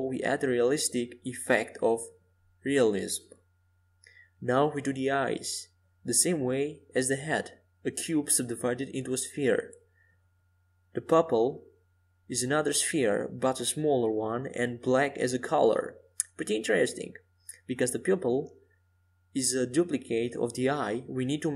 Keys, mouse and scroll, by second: 9.4-11.7 drag, 12.3-14.6 right drag, 16.9-21.5 drag.